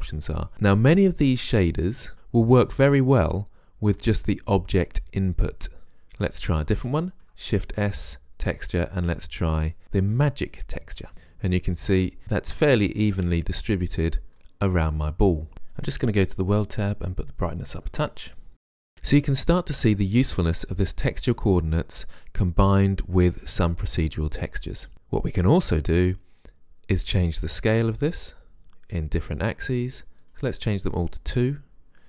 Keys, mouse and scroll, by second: 6.6 click, 7.7 shift+s, 16.1-18.9 drag, 27.7 click, 30.2 click.